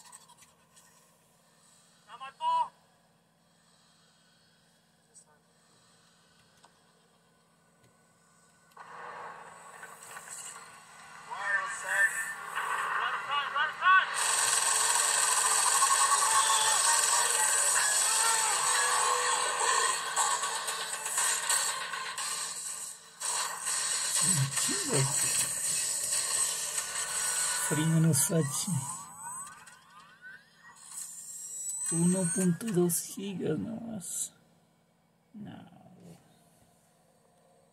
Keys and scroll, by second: 6.4 super+1, 8.5 super+2, 10.6 super+3, 13.2 super+4, 14.9 super+5, 16.6 super+6, 18.6 super+7, 24.1-26.2 typing.